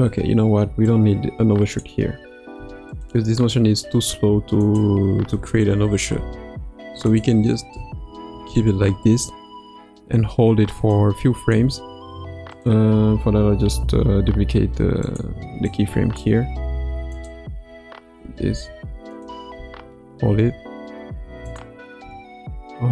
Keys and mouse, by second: 0.8-2.0 drag, 2.5 x, 4.6 click, 5.3 space, 6.1 space, 7.2-7.7 drag, 7.7 space, 8.4 space, 10.9-11.5 drag, 12.5 click, 13.7 shift+d, 15.6 click, 17.1 click, 17.6 space, 18.4 space, 19.2-19.5 drag, 19.5 space, 20.2 space, 21.4 click, 22.0 space.